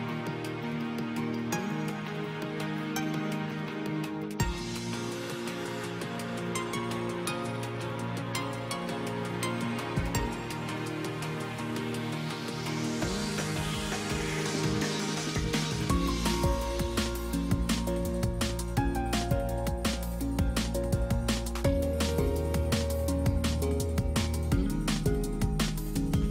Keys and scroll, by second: 15.3 space, 25.4 space.